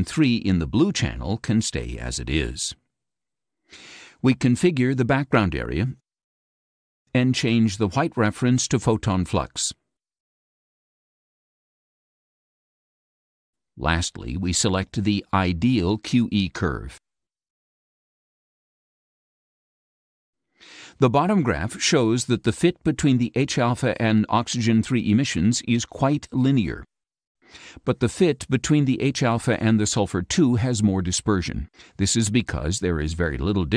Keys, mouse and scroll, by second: 3.3-5.9 ctrl+drag, 7.7 click, 8.7-10.2 drag, 11.7 click, 14.0 click, 16.1 click, 18.1 click.